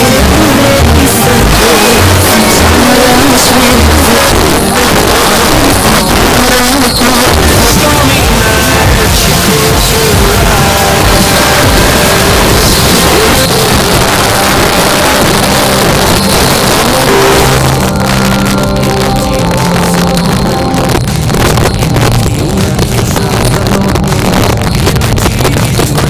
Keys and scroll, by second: 4.1 Page_Down, 13.4 Page_Down.